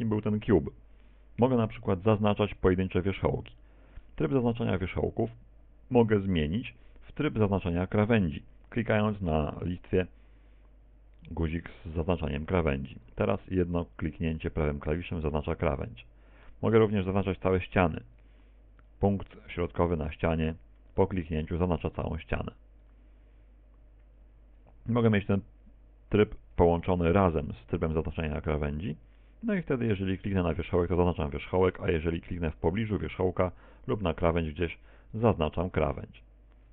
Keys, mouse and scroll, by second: 1.9 right click, 2.6 right click, 3.7 middle click, 6.7 right click, 7.4 right click, 10.4 click, 13.1 right click, 13.7 right click, 14.5 right click, 15.1 right click, 15.8 right click, 17.3 click, 18.3 right click, 18.9 right click, 19.6 right click, 20.3 right click, 21.0 right click, 22.1 right click, 22.9 right click, 24.3 click, 27.1 shift+click, 29.9 right click, 32.6 right click, 33.7 right click, 34.5 right click, 35.1 right click, 35.8 right click.